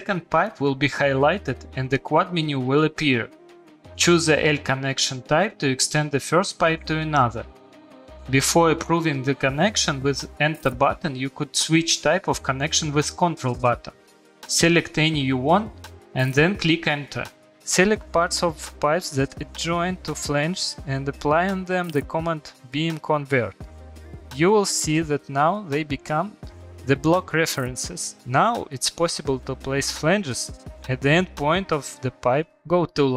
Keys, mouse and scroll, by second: 13.8 Escape, 14.0 click, 14.2 click, 16.1 middle click, 16.2 middle click, 17.4 click, 17.5 click, 18.3 click, 18.7 click, 19.2 click, 20.2 click, 20.6 click, 21.0 click, 21.2-21.6 typing, 22.6 middle click, 24.6 shift+middle click, 25.1 middle click, 28.0 click, 29.1 middle click, 29.2 middle click, 29.2 middle click, 31.2 click, 31.8 Delete, 32.1 click.